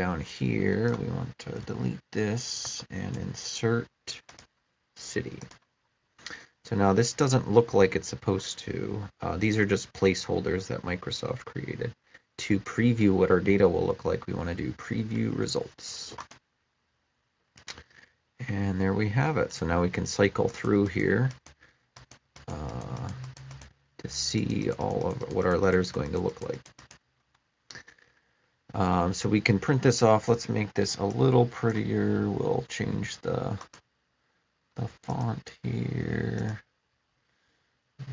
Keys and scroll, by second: 1.5 BackSpace, 2.5 space, 3.0 Left.